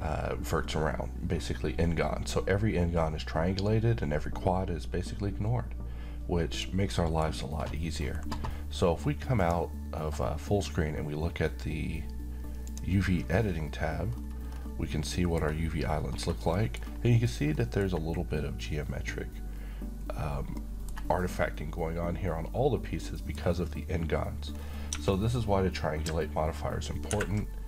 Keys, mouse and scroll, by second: 6.5 click, 6.9 middle click, 7.0 middle click, 8.0 scroll down 1, 9.4 click, 12.7 click, 14.1-14.5 scroll up 1, 15.0-15.7 middle click, 16.1-16.5 scroll up 1, 16.5 middle click, 16.8-17.5 scroll up 1, 17.5 middle click, 17.9-19.8 scroll up 1, 20.6-21.2 middle drag, 24.5-24.9 scroll up 1, 24.9 Tab, 26.5-27.1 ctrl+scroll up 1, 27.1 ctrl+`.